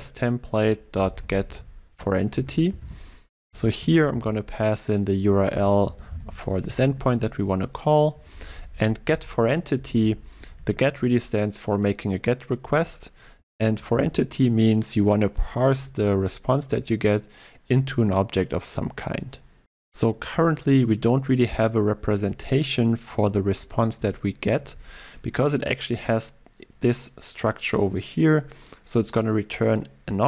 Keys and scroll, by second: 4.3 ctrl+v, 13.8 ctrl+shift+Right.